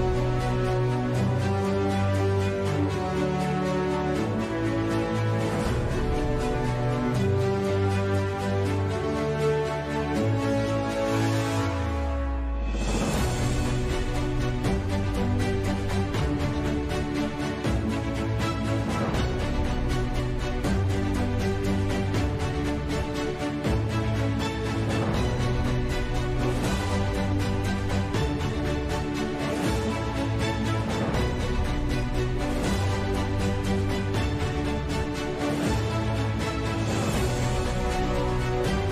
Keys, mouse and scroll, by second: 0.8 ctrl+2, 1.9 s, 2.9 g, 3.4 KP_Decimal, 4.1 s, 5.5 g, 6.8 g, 7.3 alt+s, 7.6 ctrl+z, 9.1 s, 9.5 KP_3, 9.6 KP_1, 12.6-14.3 typing, 15.3 s, 15.7 s, 16.9 a, 17.0 ctrl+s, 17.8 ctrl+s, 18.5 s, 19.3 s, 19.7 Tab, 20.7 KP_Divide, 20.8 KP_Decimal, 21.9 click, 22.5 ctrl+KP_Add, 22.7 ctrl+KP_Add, 23.4 g, 24.1 Tab, 24.4 KP_Divide, 24.9-27.2 typing, 25.7 ctrl+s, 26.0 drag, 27.7 ctrl+z, 27.9 alt+d, 28.6 g, 30.7 n, 30.9 n, 32.3 n, 34.3 a, 34.4 ctrl+s, 34.9 KP_5, 35.8 Tab, 36.1 Tab, 36.4 g, 36.8 Tab, 37.1 Tab, 37.5 a, 37.6 ctrl+s.